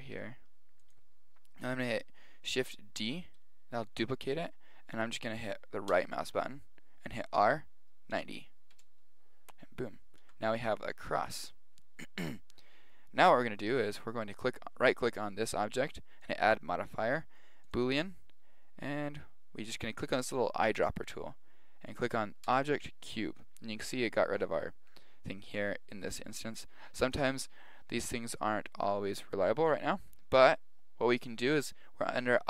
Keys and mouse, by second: 0.2 s, 3.0 shift+d, 7.4 r, 10.2 Tab, 10.7-13.4 middle drag, 13.6 middle click, 13.7 middle click, 14.1 right click, 16.2 click, 20.7-22.6 drag, 24.0-26.7 middle drag.